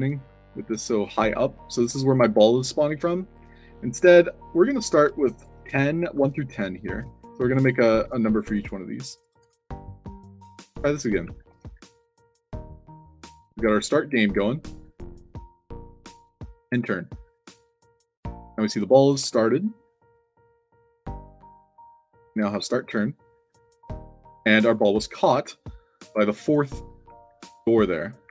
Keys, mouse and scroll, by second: 0.0 shift+c, 1.8 f, 5.5-8.1 typing, 7.3 alt+click, 9.3 Tab, 11.1-12.2 typing, 13.5 d, 15.8-16.9 typing, 19.2 e, 22.4 e, 24.2 w, 27.0 d.